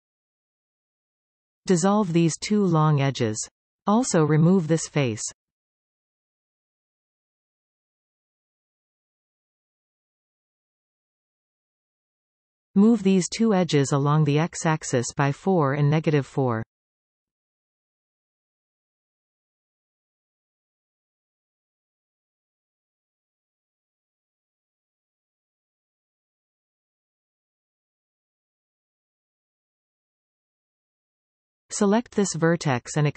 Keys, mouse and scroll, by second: 2.0 click, 2.4 shift+click, 3.6 x, 6.9 click, 8.0 x, 9.6-13.0 middle drag, 13.5 click, 14.5 click, 15.1-16.3 middle drag, 16.3 g, 19.4 click, 21.7 g, 24.2 KP_1, 26.0-29.0 middle drag, 31.5 click, 32.5 click.